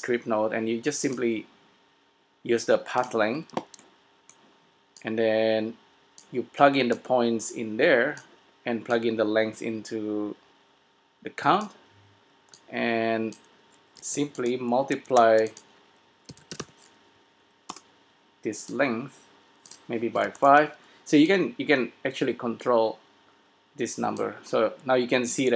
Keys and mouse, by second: 5.2-6.4 drag, 7.1-8.8 drag, 9.2-10.9 drag, 12.8-14.7 drag, 14.2 s, 15.2 shift+a, 19.0-24.6 drag.